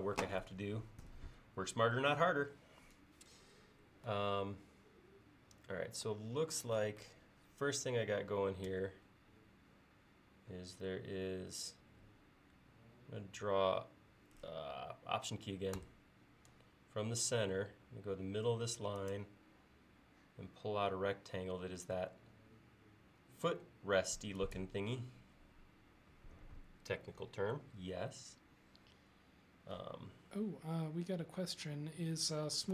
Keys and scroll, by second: 8.8 r.